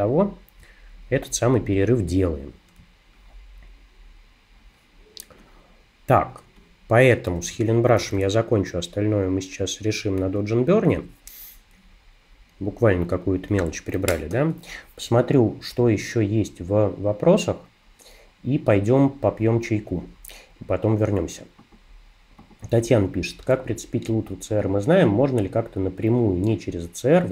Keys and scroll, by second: 2.8 space, 8.0 super+-, 10.3 super+-.